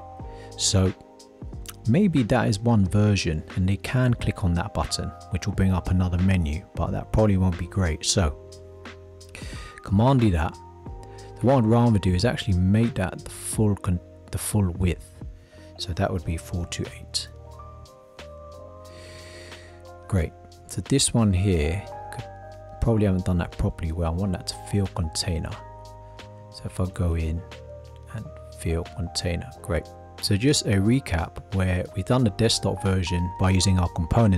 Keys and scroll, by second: 9.7 super+d.